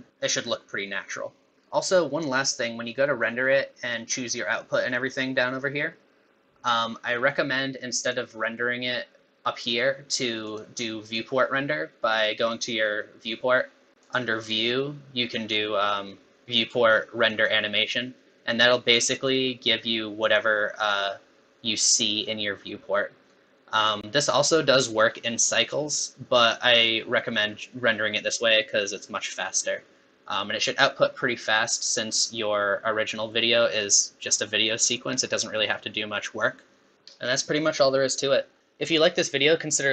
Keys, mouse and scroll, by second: 8.1 click, 10.5 click, 14.0 click.